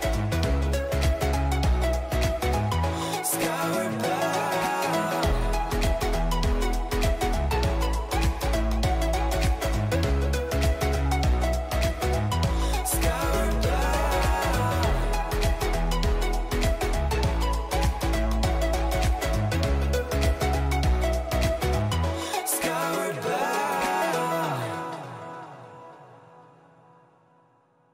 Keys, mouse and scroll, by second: 0.7 ctrl+z, 2.7 a, 3.1 a, 3.4 w, 5.2 a, 7.7 t, 15.6-18.5 middle drag, 20.5-24.0 middle drag, 26.9 middle click.